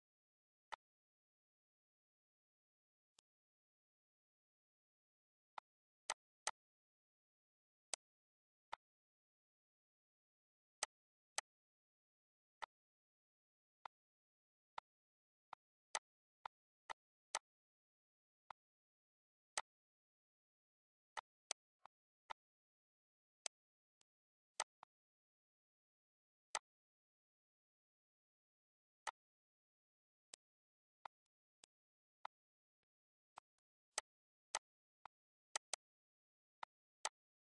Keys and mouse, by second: 0.5 click, 3.0 click, 5.3 ctrl+shift+click, 5.8 click, 7.5 click, 8.0 ctrl+d, 8.2 click, 10.0 ctrl+d, 10.2 click, 10.6 ctrl+d, 10.7 click, 11.7 click, 12.9 click, 13.7 click, 15.2 shift+click, 17.2 click, 18.3 click, 19.7 click, 22.0 click, 23.1 click, 25.3 click, 28.1 click, 30.0 click, 31.1 click, 31.6 shift+click, 32.1 click, 34.2 click, 36.1 click.